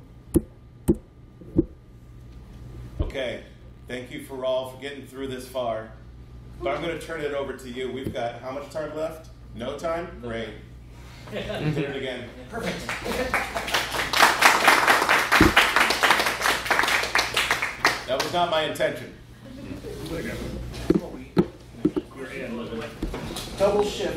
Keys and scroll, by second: 0.3 Escape, 0.9 Escape.